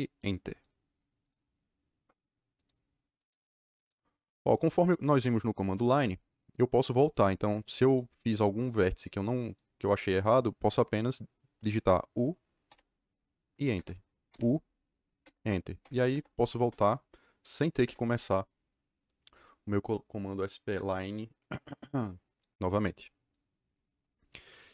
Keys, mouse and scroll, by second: 1.2 click, 2.5 click, 3.1 click, 3.7 click, 4.5 click, 7.8 click, 8.5 click, 9.4 click, 9.8 click, 12.6 u, 13.7 KP_Enter, 15.1 KP_Enter, 15.7 u, 16.1 KP_Enter, 16.4 u, 16.6 KP_Enter, 17.7 u, 17.8 KP_Enter, 20.2 click, 20.9 click, 21.4 click, 21.7 click, 22.2 click.